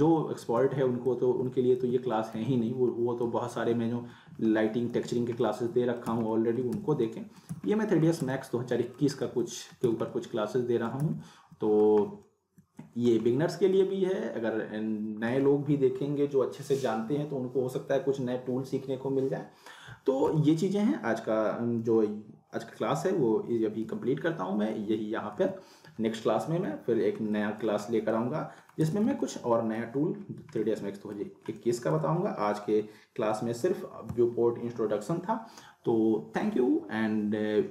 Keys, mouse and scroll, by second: 4.9 z, 5.4-6.0 alt+middle click, 6.1 z, 6.4 alt+middle click, 6.7 z, 7.0-7.7 alt+middle click, 7.5 z, 7.7 alt+middle click, 8.2 z, 8.5-9.1 alt+middle click, 9.2 scroll up 1, 9.4 alt+middle click, 9.9 z, 10.0-11.0 alt+middle click, 11.0 z, 11.3-11.9 alt+middle click, 12.0 scroll up 1, 12.2-13.2 middle click, 13.3-14.0 alt+middle drag, 23.8 z, 27.3 middle click, 27.8 scroll up 1, 28.1-28.7 alt+middle click, 28.8 z, 29.2-29.8 alt+middle click, 30.3 scroll down 1, 30.6-31.2 alt+middle drag.